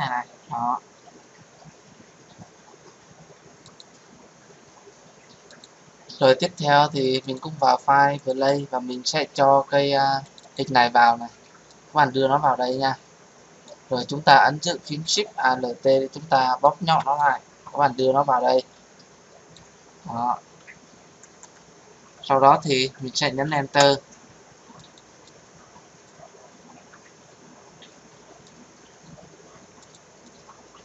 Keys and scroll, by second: 23.7 Return.